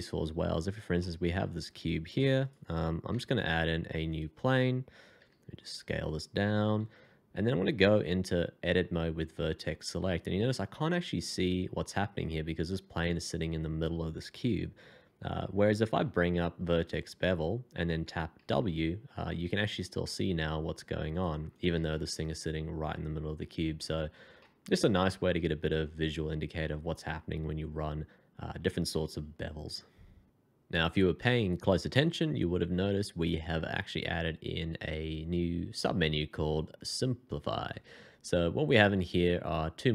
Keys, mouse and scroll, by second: 0.2 scroll up 1, 0.9 shift+scroll up 1, 0.9 shift+middle click, 3.1 f, 5.1 s, 6.6 ctrl+a, 8.9 1, 15.9 f, 18.3 w, 21.5 double click, 21.6 Escape, 21.8 middle click, 24.3 shift+middle click, 32.6 shift+2.